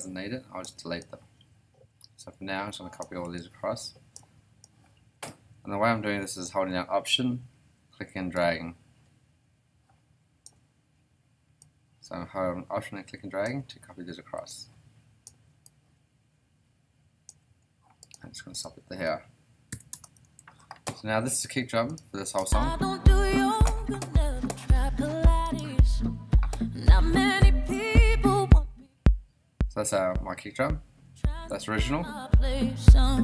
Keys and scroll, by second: 19.7 BackSpace, 19.9 Return, 20.4 super+s, 22.4 space.